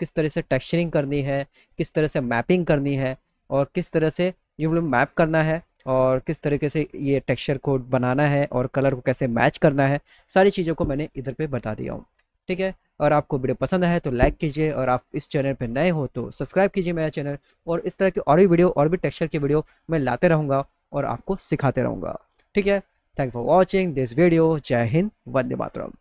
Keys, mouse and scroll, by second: 5.4 click, 8.6 click.